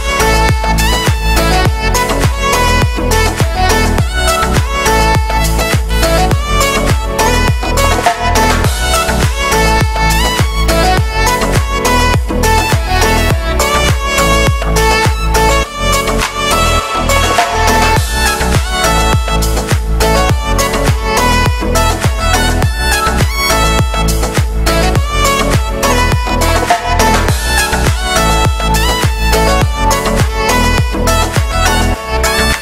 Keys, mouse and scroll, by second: 0.1 g, 0.9 right click, 1.1 g, 1.4 middle click, 2.0-2.4 scroll down 4, 2.4 middle click, 2.7 right click, 2.8 k, 3.3-4.7 scroll up 2, 4.7 click, 4.8 r, 6.6 scroll down 2, 6.7-8.3 shift+middle drag, 8.3-8.9 scroll up 1, 8.9 click, 9.2 middle click, 9.6 z, 9.6 a, 9.7 a, 10.2 b, 11.1-12.3 scroll down 9, 11.2 shift+middle click, 11.7 shift+middle click, 12.3 Tab, 12.5 shift+middle click, 12.8-13.8 scroll up 2, 13.0 shift+middle click, 13.8 w, 14.0 middle click, 14.8 scroll down 3, 15.0 shift+middle click, 15.6 a, 15.7 a, 16.3 middle click, 17.0 click, 17.4 middle click, 17.8 right click, 18.3 alt+d, 19.2 middle click, 19.7 g, 20.3 shift+right click, 20.6 alt+d, 22.7 ctrl+m, 23.6-24.8 middle drag, 24.8 right click, 25.5 Tab, 25.7 shift+middle click, 25.8 scroll up 1, 26.1-28.3 typing, 26.5 right click, 27.2 scroll down 1, 27.4 shift+middle click, 28.1 shift+middle click, 29.0 shift+middle click, 29.3-30.0 scroll up 3, 30.0 ctrl+m, 30.9-31.2 scroll up 1, 31.2 click, 31.4 z.